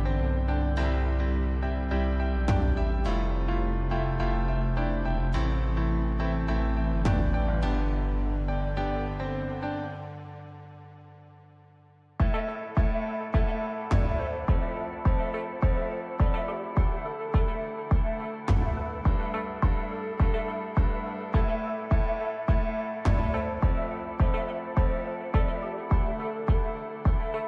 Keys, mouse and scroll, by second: 3.4 click, 4.1-8.0 scroll down 3, 8.0 click, 12.1 click, 14.4 click, 16.0 click, 19.8 click, 22.3 click, 24.4-26.8 drag.